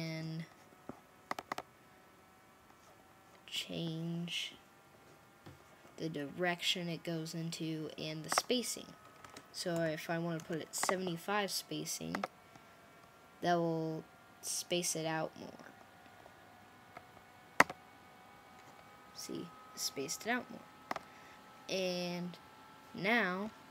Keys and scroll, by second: 9.6-10.3 typing.